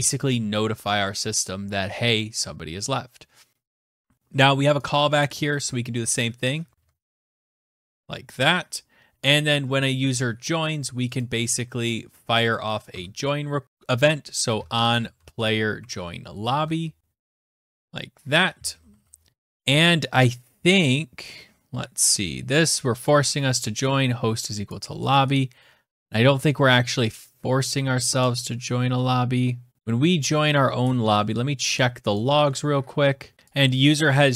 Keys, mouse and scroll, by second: 2.9 scroll down 3, 3.0 scroll, 4.0 click, 5.7 click, 6.0 ctrl+c, 6.5 click, 6.9 Return, 7.3 ctrl+v, 10.4 click, 11.1 click, 11.7 Tab, 12.2 Tab, 13.4-17.3 typing, 15.0 Tab, 17.5 Right, 18.1 ctrl+s, 18.8-19.3 scroll, 20.1-20.5 scroll, 23.9 click, 24.3 click, 24.8 scroll, 27.2-28.9 scroll, 31.3 click, 31.3 click, 32.2-33.3 scroll, 33.3 scroll, 33.4 alt+Tab, 33.6 click, 34.0 alt+Tab.